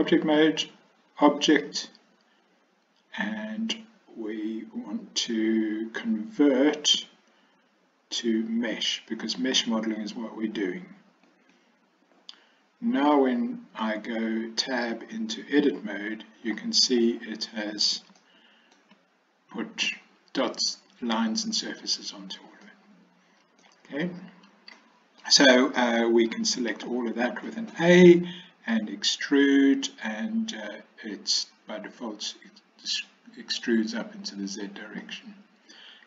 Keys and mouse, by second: 1.4-7.6 drag, 7.6-11.3 right drag, 11.3 click, 15.7 Tab, 18.2-18.8 shift+middle drag, 22.7-23.7 middle drag, 24.8 middle click, 26.8 a, 28.8 e, 35.1-36.0 middle drag.